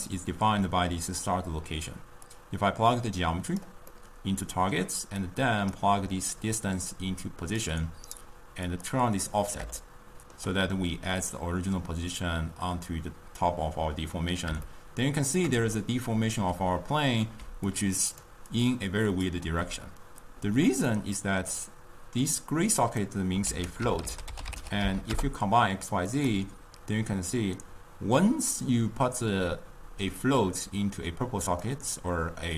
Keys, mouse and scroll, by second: 2.4-4.1 drag, 4.1-5.6 middle drag, 5.6 click, 6.5-9.0 drag, 10.1-13.8 shift+middle drag, 14.8-15.7 shift+middle drag, 15.7 d, 16.0 right click, 16.5 d, 17.6 d, 17.8-19.3 drag, 19.3 d, 20.0 d, 21.4-22.8 middle drag, 22.8-23.6 drag, 23.6 ctrl+a, 30.3 drag.